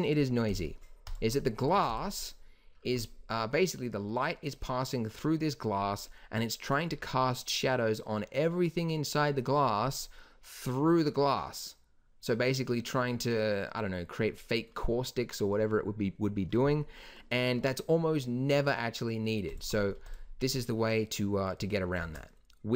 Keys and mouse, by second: 1.7 ctrl+s, 7.9-9.9 middle drag, 19.6 g, 22.0 shift+a.